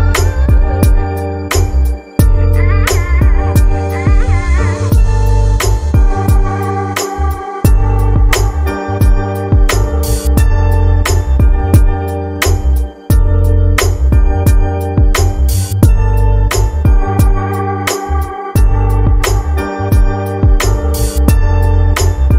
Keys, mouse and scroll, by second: 2.0-5.0 drag, 5.0 Left, 6.3-7.2 Left, 7.4 Left, 7.5 Left, 8.0 Left, 15.4 click, 17.1-17.7 drag, 19.8 click, 20.7 click, 22.1 click.